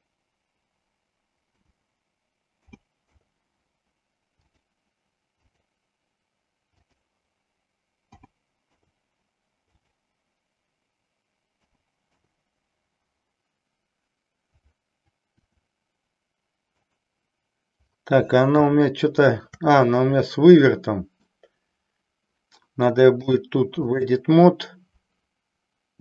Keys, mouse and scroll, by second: 4.6-5.6 drag, 6.7-9.0 drag, 9.7-12.5 drag, 15.4 r, 18.6 shift+middle click, 20.4-21.4 middle drag, 23.2 click.